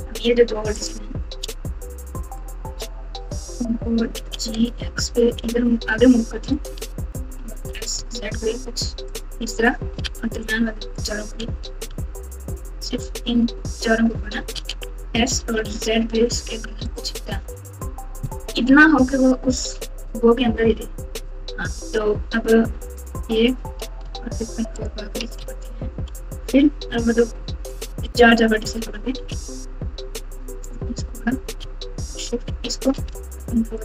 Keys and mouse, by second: 2.3 shift+click, 4.2 g, 7.5 s, 10.0 alt+z, 10.6 click, 11.4 alt+z, 11.8 alt+z, 14.5 alt+z, 15.1 s, 17.5 Tab, 18.6-20.8 typing, 21.2 Tab, 26.1 f, 28.0 click, 29.3 alt+z, 30.6 click, 32.7 shift+click, 33.7 ctrl+click.